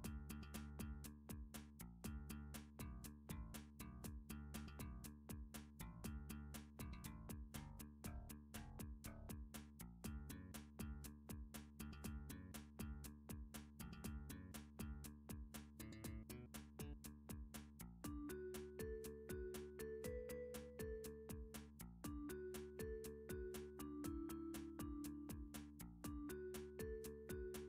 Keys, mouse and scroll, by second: 0.5 click, 0.7-1.5 scroll, 1.8 shift+scroll, 2.8 click, 3.5 shift+click, 5.4 m, 7.1 click, 7.8 click, 8.3 shift+click, 9.9 m, 10.5 click, 10.8-11.4 scroll, 11.8-12.4 scroll, 12.8-15.0 shift+middle click, 15.6 click, 16.8 Tab, 19.3 click, 20.6 click, 21.5 click, 22.7 g, 23.6 x, 25.0 click, 26.6 a.